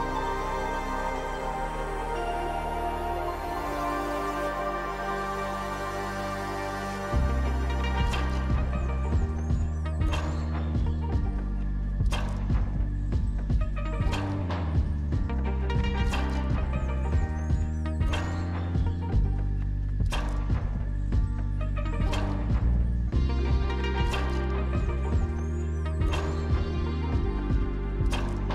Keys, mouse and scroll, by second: 10.7-12.0 scroll up 2, 12.0-12.4 scroll down 2, 12.6-14.0 scroll down 1, 18.1 scroll down 11, 18.4 middle click, 18.6-19.3 scroll up 1, 19.3 double click, 22.0 double click, 22.5 5, 22.6 Return, 23.8 2, 23.9 Return, 25.8-27.5 typing, 27.6 Return.